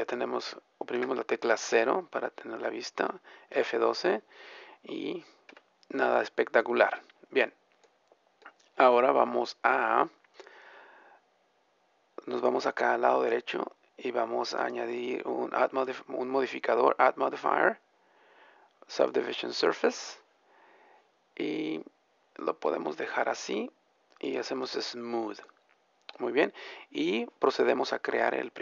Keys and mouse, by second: 1.0 KP_0, 1.2-2.8 drag, 5.3 F12, 5.3 Escape, 6.0-7.0 drag, 21.7-23.7 middle drag, 24.2-27.3 drag.